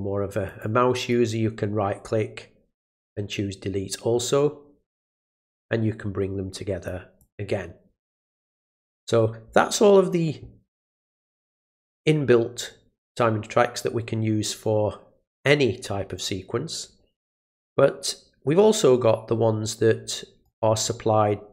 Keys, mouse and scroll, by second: 0.4 click, 0.9 right click, 3.0 click, 5.3-6.8 drag, 7.2 click, 20.4 right click.